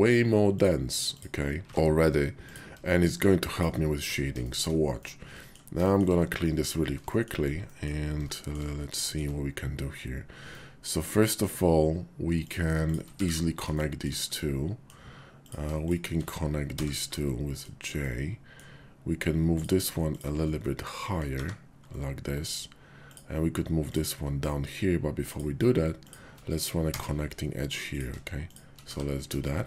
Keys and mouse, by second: 0.5 click, 1.0 click, 1.6 q, 1.7 q, 3.5 shift+click, 4.0 Tab, 4.4 shift+click, 5.0 click, 5.9 shift+click, 6.4 click, 7.1 shift+click, 7.6 middle click, 9.0 shift+click, 10.4 middle click, 11.3 shift+click, 13.6 shift+1, 13.7 shift+click, 14.2 click, 16.7 j, 17.1 click, 17.9 click, 18.5 middle click, 20.5 middle click, 21.4 1, 21.9 click, 22.0 middle click, 23.0 click, 24.4 middle click, 25.2 click, 25.9 shift+click, 26.9 j, 28.4 shift+click, 29.3 1, 29.4 shift+click.